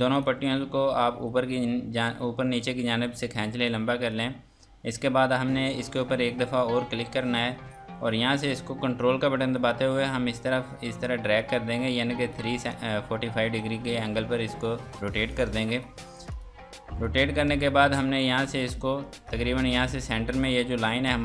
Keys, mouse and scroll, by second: 1.0 click, 3.0-3.4 scroll down 1, 3.4 F2, 3.6 click, 7.0 click, 12.3 click, 15.7 click, 19.6 F2, 19.7 click.